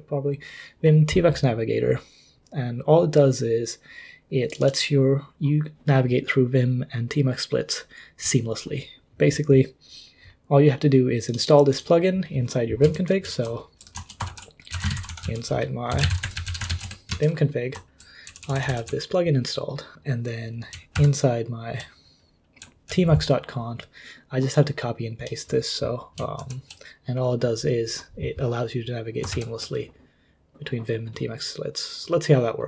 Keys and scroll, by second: 12.9 super+l, 14.3 ctrl+l, 14.5-17.2 typing, 18.3-20.4 typing, 20.9 super+h, 22.6 j, 26.4 super+l, 26.8 ctrl+d, 26.8 ctrl+u, 26.8 typing, 29.3 ctrl+l.